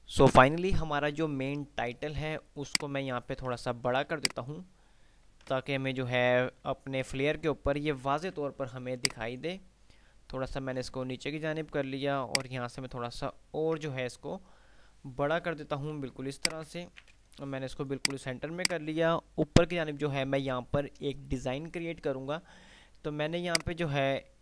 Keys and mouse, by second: 2.8 click, 4.5 shift+click, 7.0 ctrl+r, 9.1-12.5 drag, 12.5-13.5 shift+drag, 15.5 ctrl+r, 16.3 shift+click, 17.0 c, 18.1 F2, 19.0-19.3 click, 20.1 typing, 23.6-24.4 drag.